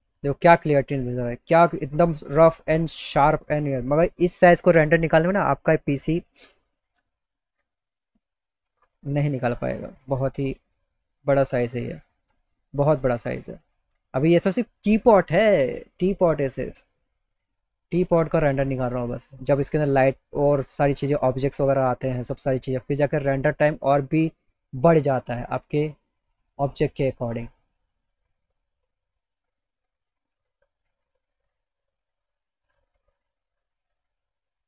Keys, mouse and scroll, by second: 4.0 click, 5.7 click, 8.4 click, 9.9-10.9 drag, 12.2 click, 25.9 click, 27.0-28.1 drag, 29.1 click, 32.4 click, 33.8 click.